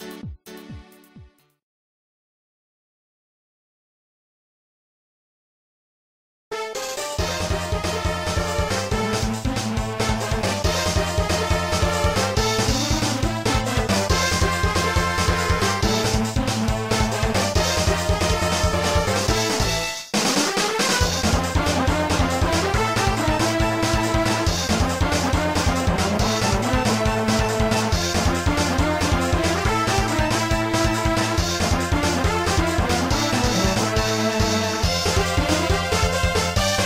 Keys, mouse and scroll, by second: 0.3 middle click, 1.5 right click, 1.9 right click, 2.5 right click, 2.9 middle click, 3.7 right click, 4.5 ctrl+s, 4.6 click, 5.1 scroll down 1, 6.3-7.0 typing, 9.7-10.8 typing, 11.3 Return, 12.9 ctrl+s, 13.1 click, 13.9-14.9 typing, 15.8 scroll up 2, 16.5 middle click, 17.8 scroll up 1, 23.0 click, 25.7 click, 27.4 click, 28.0 click, 28.7 s, 33.1 click.